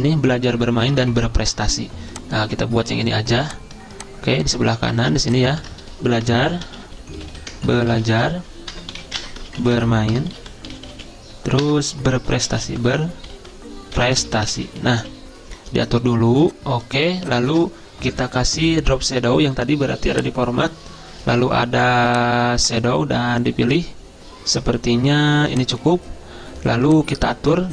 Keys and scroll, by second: 5.7 ctrl+a, 6.6-14.6 typing, 11.7 Return, 16.8 typing, 17.5 ctrl+a.